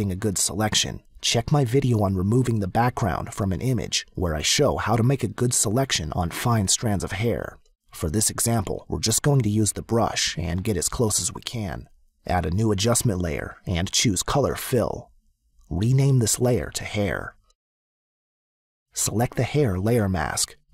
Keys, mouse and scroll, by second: 12.0 click, 14.2 click, 16.1 click, 16.3-17.3 typing, 18.0 Return, 19.9 click.